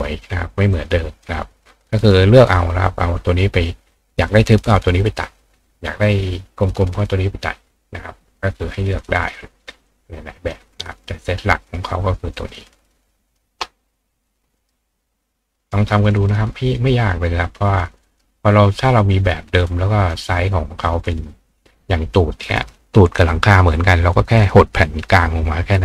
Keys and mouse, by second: 0.7 click, 1.2 click, 8.4 click, 9.9 click, 11.7 click, 12.3-13.4 drag, 14.3 click, 14.6 right click, 16.2 click, 16.7-17.8 drag, 17.8 right click, 18.2-19.6 drag, 20.1-21.2 drag, 21.2-25.8 right drag.